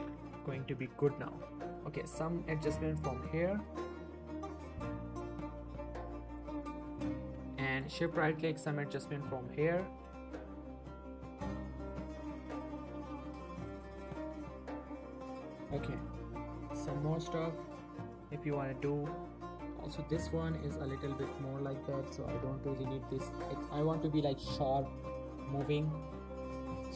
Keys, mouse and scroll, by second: 0.2 shift+middle click, 0.7 alt+a, 1.0-3.1 shift+drag, 4.0 shift+r, 4.7 shift+right click, 5.1-5.7 shift+click, 6.1 shift+click, 6.6 shift+r, 7.1 shift+right click, 7.5 alt+a, 7.8 shift+click, 8.0 shift+middle click, 8.2 shift+scroll up 1, 8.5-9.0 shift+drag, 10.5 shift+r, 11.7 shift+right click, 12.1 alt+a, 12.4-13.7 shift+drag, 14.6 shift+r, 15.3 shift+right click, 15.6 alt+shift+a, 15.9 shift+click, 16.2 shift+middle click, 16.5 shift+middle click, 17.1 shift+middle click, 17.5 alt+a, 18.0 shift+click, 18.4 shift+middle click, 18.5 shift+scroll up 1, 18.8 r, 19.6 right click, 19.9 click, 22.6 r, 23.9 right click, 24.1 alt+a, 24.4 shift+click, 25.0 shift+click, 25.7 r, 26.1 right click, 26.4 shift+middle click, 26.7-26.9 click.